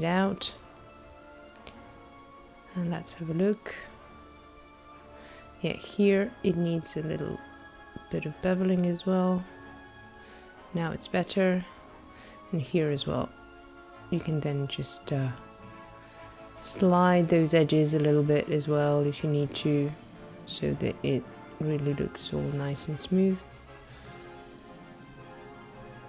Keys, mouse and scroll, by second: 2.3 click, 2.6 middle click, 2.8 shift+middle click, 5.2 shift+middle click, 6.0 scroll down 1, 6.5 scroll up 5, 7.9 shift+middle click, 8.3 shift+middle click, 9.9 Tab, 10.1 click, 10.3 ctrl+b, 10.5 click, 13.8 middle click, 13.9 scroll down 2, 14.0 shift+middle click, 14.5 shift+middle click, 15.0 middle click, 15.5 scroll up 2, 15.7 click, 15.9 ctrl+b, 16.0 click, 19.3-19.8 scroll down 2, 20.0 middle click, 20.5 click, 21.3 Tab, 21.8 middle click, 22.1-22.6 scroll up 4, 24.5 middle click, 24.7 shift+middle click, 25.6 shift+middle click.